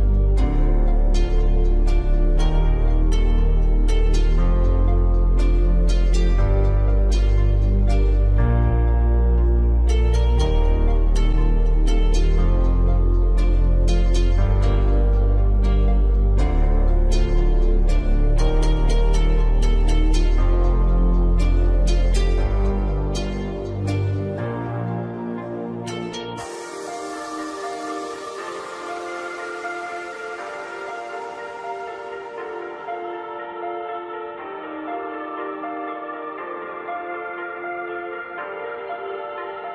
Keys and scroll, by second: 36.8 ctrl+e.